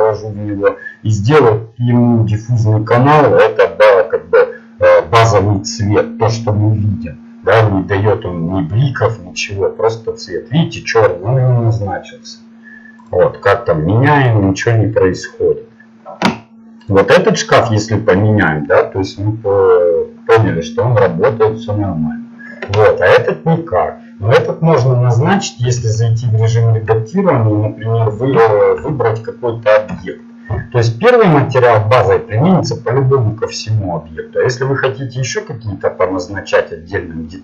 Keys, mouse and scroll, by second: 16.8-18.8 drag, 25.7 Tab, 28.3 a, 28.8 a, 29.9 l, 36.7-37.4 middle drag.